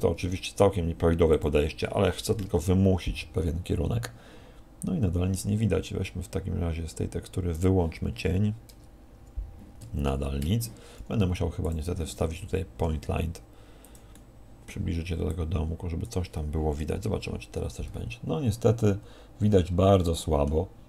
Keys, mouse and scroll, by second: 0.1 g, 1.4 click, 4.9 Escape, 7.5 click, 7.5 scroll down 4, 10.4 F12, 10.4 Escape, 11.6 click, 12.8 g, 13.9 click, 14.1 middle click, 15.3 click.